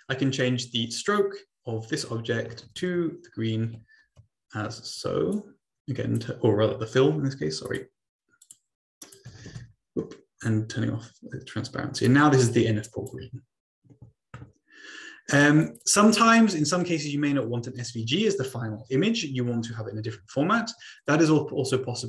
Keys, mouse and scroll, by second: 2.5 ctrl+a, 3.0 ctrl+v, 4.1 Return, 5.3-6.2 drag, 7.6 click, 8.4 click, 8.5-9.9 drag, 9.3 ctrl+a, 9.5 ctrl+v, 12.0-13.9 drag, 15.6-16.7 drag, 17.7 click, 18.0 click, 21.0 click.